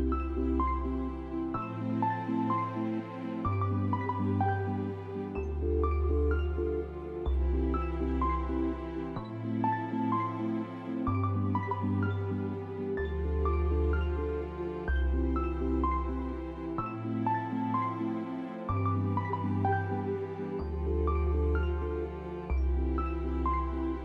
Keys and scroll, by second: 0.5 s, 1.8 s, 2.4 F4, 4.6 F4, 5.2 1, 6.5 F4, 6.9 s, 10.7 s, 11.4 F4, 14.4 F4, 15.2 ctrl+z, 15.3 F4, 17.7 s, 21.5 p.